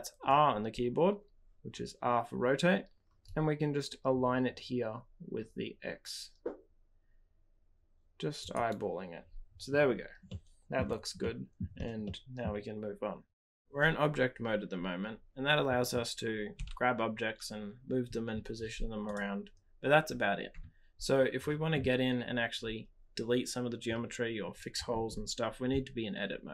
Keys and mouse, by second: 10.2-10.8 middle drag, 11.2-11.5 shift+middle drag, 12.0 middle click, 16.6 g.